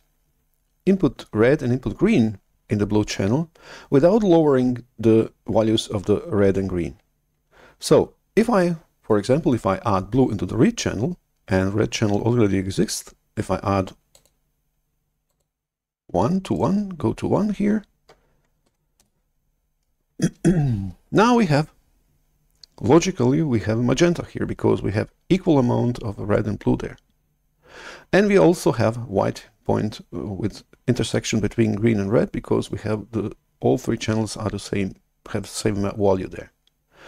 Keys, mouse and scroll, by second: 14.1 click, 15.2-16.4 drag, 16.4-18.5 right drag, 18.5 1, 18.7 1, 18.9 Return.